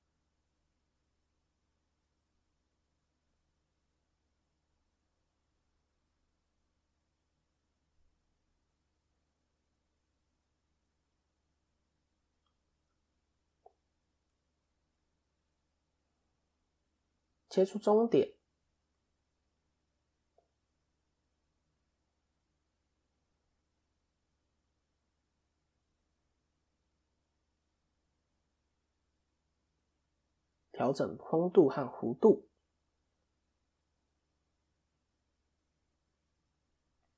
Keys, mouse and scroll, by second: 0.2 ctrl+a, 2.1 ctrl+5, 3.0 Tab, 4.3 click, 5.6 KP_1, 6.5-6.8 scroll down 3, 6.8 shift+middle click, 7.1-7.6 shift+scroll up 3, 7.6 shift+middle click, 8.6 click, 10.7 s, 13.3 click, 14.1-14.5 scroll up 3, 14.5 shift+middle click, 15.4 click, 16.0 KP_3, 17.1 ctrl+r, 21.6 click, 22.4 KP_1, 23.5 scroll up 1, 23.8 middle click, 24.8 click, 27.3 KP_1, 28.8-37.1 click.